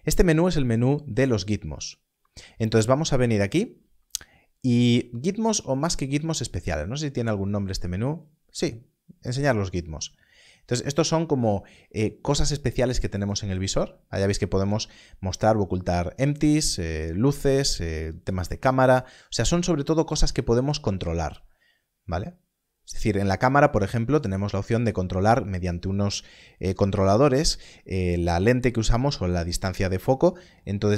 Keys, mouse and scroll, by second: 0.6 click, 13.2 click.